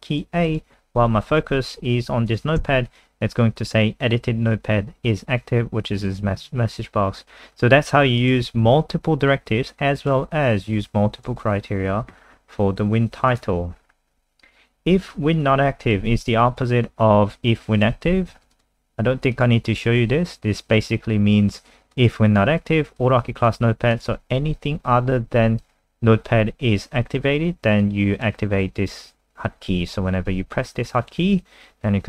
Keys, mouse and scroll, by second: 2.6 a, 7.5 click, 8.6 alt+F4, 10.0 click, 13.8-15.1 scroll down 5, 15.3 click, 16.1 ctrl+c, 16.2 click, 16.6 click, 18.1 ctrl+v, 18.3 ctrl+s, 18.5 click, 19.3 click, 19.7 click, 21.9 click.